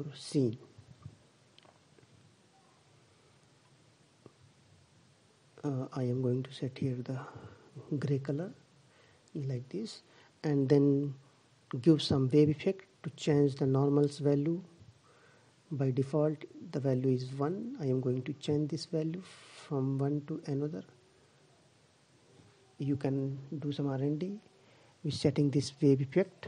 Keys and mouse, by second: 0.8-2.1 drag, 12.3 click, 19.4-21.0 drag, 24.3-25.7 drag.